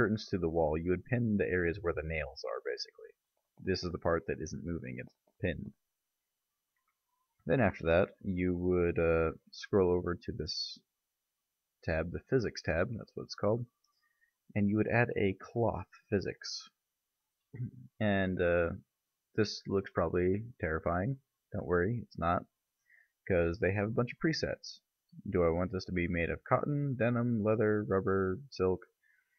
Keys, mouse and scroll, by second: 8.9 Tab, 9.4 middle click, 12.2 click, 16.3 click, 18.1-23.9 middle drag, 23.9 click.